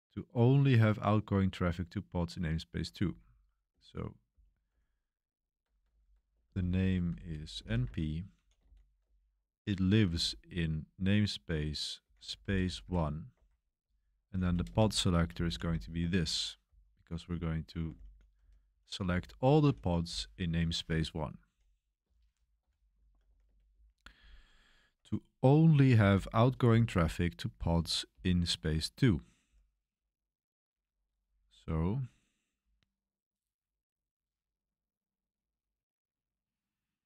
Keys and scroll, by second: 3.0 typing, 4.3-10.1 typing, 11.7-24.3 typing, 16.0 Escape, 30.7-31.5 typing.